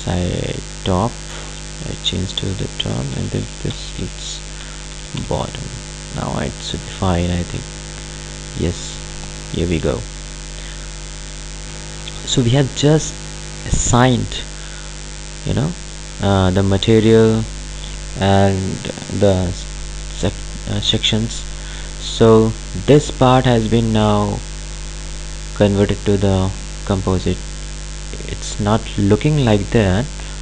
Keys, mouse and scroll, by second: 0.8 click, 2.9-5.5 typing, 6.4 click, 9.9-12.8 ctrl+alt+drag, 14.0-19.2 ctrl+alt+drag, 22.3 click, 27.3 click, 29.9-30.4 ctrl+alt+drag.